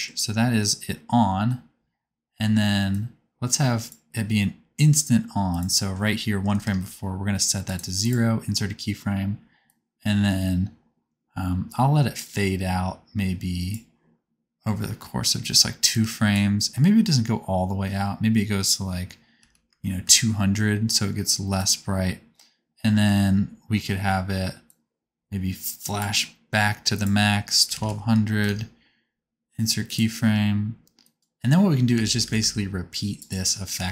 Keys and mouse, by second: 2.9-7.7 drag, 19.6 KP_0, 20.1-21.6 drag, 20.1-21.6 middle drag, 20.1-25.0 right drag, 24.6 click, 24.6 middle click, 27.9 KP_0, 29.9 right click, 31.0 click, 31.0 middle click, 31.0 right click, 31.2 space, 31.9 a, 32.3 c, 33.3 shift+click, 33.7 shift+d.